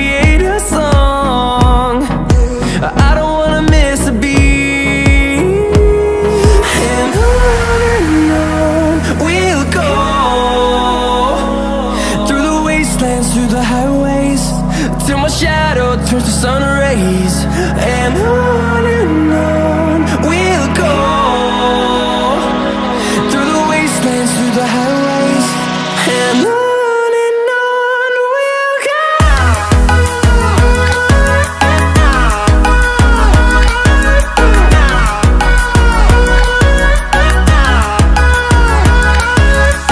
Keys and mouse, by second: 0.4 click, 2.0 i, 4.1-5.8 drag, 6.7 i, 8.6 click, 10.8 click, 12.2 i, 13.5-16.2 drag, 17.3 i, 18.3 typing, 18.5 click, 20.5 click, 22.0 i, 23.2 click, 24.4-26.0 drag, 27.1 i, 29.1-30.7 drag, 31.7 click, 32.8-33.9 drag, 33.1 KP_1, 35.3 click, 39.6 drag.